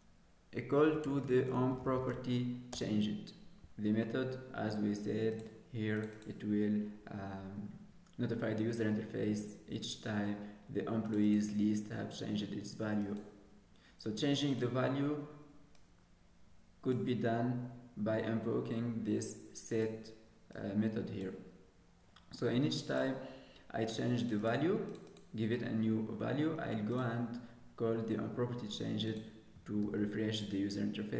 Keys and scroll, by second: 29.8 ctrl+s.